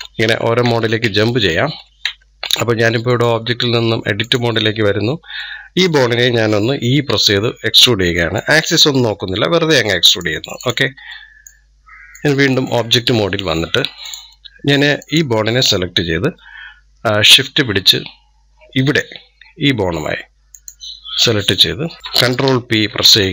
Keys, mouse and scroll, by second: 0.0 ctrl+Tab, 0.1 ctrl+Tab, 0.5 ctrl+Tab, 0.8 ctrl+Tab, 1.4 ctrl+Tab, 1.9 ctrl+Tab, 2.9-5.2 drag, 5.2-6.9 middle drag, 6.9 e, 9.0 e, 10.4 click, 10.9-12.0 middle drag, 12.0-13.2 drag, 13.2-13.9 middle drag, 13.9 click, 14.8 click, 15.8-16.4 scroll up 1, 20.4 shift+click, 22.7 ctrl+p.